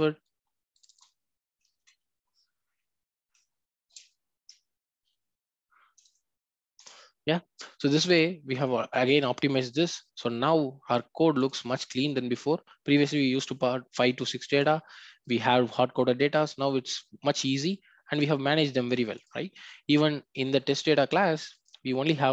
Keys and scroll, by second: 3.9 ctrl+space, 4.3 Return, 21.6 ctrl+b.